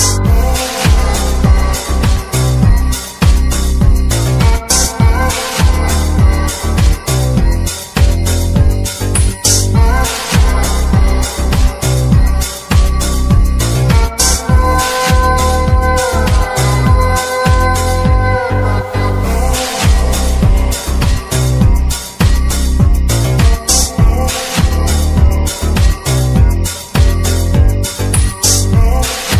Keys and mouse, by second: 0.7 click, 0.9 click, 4.0 typing, 4.5 drag, 7.3 click, 8.5-9.8 drag, 10.8-12.3 drag, 19.2-20.9 drag, 22.7-24.1 drag, 27.1-27.8 shift+middle drag.